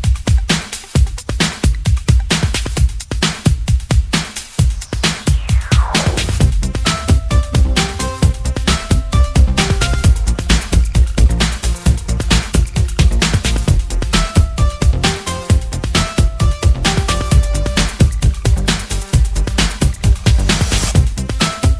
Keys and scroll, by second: 17.4-18.6 typing, 21.4 Return.